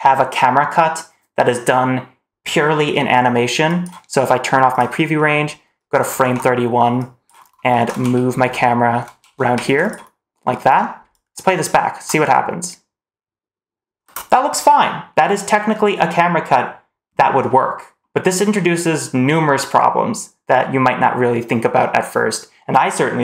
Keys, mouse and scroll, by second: 3.6 click, 4.6 click, 5.0 middle click, 6.1 alt+2, 6.9 click, 7.6 shift+`, 11.0 click, 11.8 space, 13.9 space.